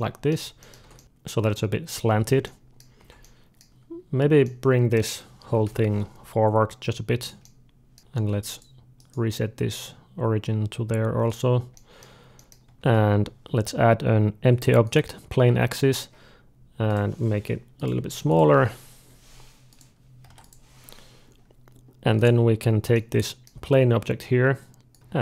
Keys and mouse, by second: 0.2 z, 0.7 alt+a, 2.3-6.3 middle drag, 2.8 Tab, 5.2 g, 7.3 middle click, 8.0-11.2 drag, 8.1 shift+s, 8.8-11.2 right drag, 11.6-14.8 middle drag, 12.6 shift+a, 16.7-21.6 drag, 22.0-24.0 drag, 22.8-24.8 middle drag, 24.8 click.